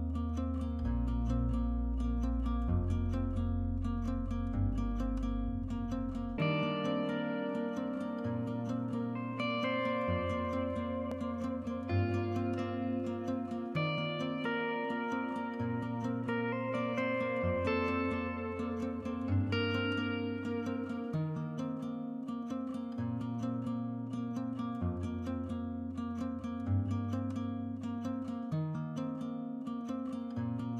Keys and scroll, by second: 4.0 1, 7.9-9.6 Escape, 12.2-14.5 typing, 21.6-22.5 typing.